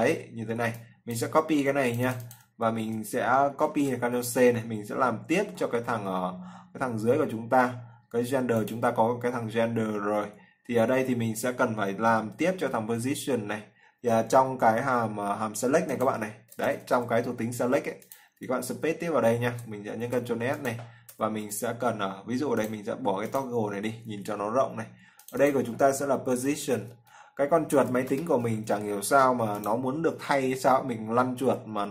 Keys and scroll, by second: 5.6 ctrl+c, 18.6 ctrl+v, 19.8 ctrl+s.